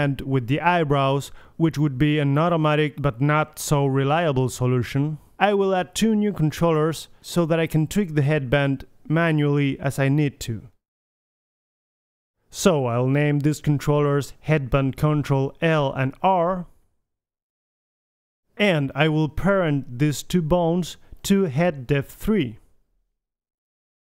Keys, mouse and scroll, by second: 3.2 middle click, 4.0 KP_3, 4.7 middle click, 5.3-6.4 drag, 5.8 Tab, 6.3 shift+d, 6.8 middle click, 7.1 r, 8.0 KP_1, 8.3 g, 9.5 KP_3, 9.7 g, 10.1 r, 10.4 g, 11.3 right click, 11.8 click, 15.5 ctrl+c, 16.0 click, 16.8 click, 18.8 Tab, 19.6-20.0 drag, 20.7 KP_3, 21.5 Tab, 22.3 h, 22.8 h.